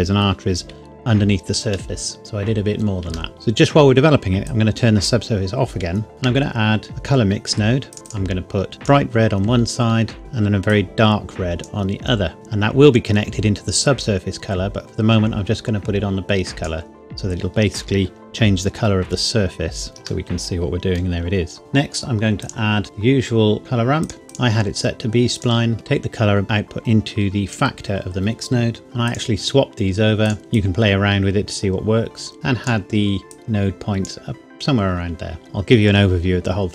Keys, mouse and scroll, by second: 1.9 shift+middle click, 2.2-3.1 scroll down 1, 3.3 shift+middle click, 4.5 click, 6.1 shift+a, 7.9 click, 19.9 shift+middle click, 20.3 middle click, 22.4 click, 24.0 click, 24.1 scroll up 1, 24.3 click, 29.1 click, 35.4-36.7 scroll down 2.